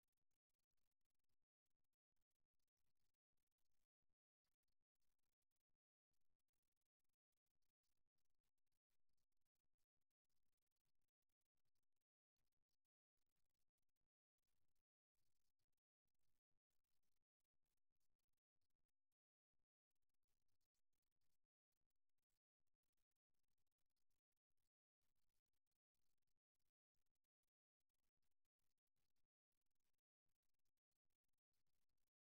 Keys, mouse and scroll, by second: 3.5 click, 4.4-5.4 drag, 8.5 KP_3, 12.5-17.6 middle drag, 19.6-23.0 middle drag, 28.8 g, 31.8-32.2 right drag.